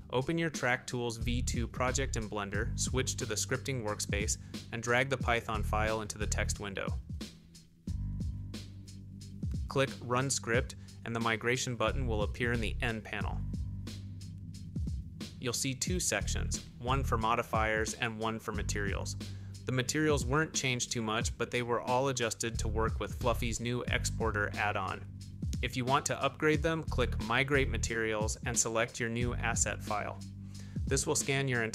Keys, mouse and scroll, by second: 1.0 click, 2.6-4.8 drag, 14.5 n, 28.7 click.